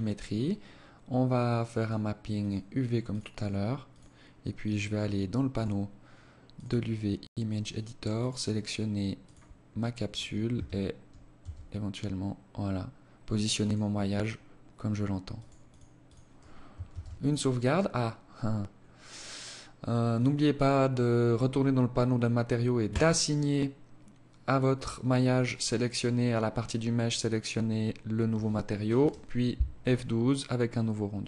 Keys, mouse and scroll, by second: 0.1-0.8 scroll down 4, 0.8 click, 1.4 click, 2.9 click, 4.6 click, 15.0 click, 15.8 ctrl+s, 17.4-18.2 scroll up 12, 18.2 scroll down 1, 19.1 click, 21.8 click.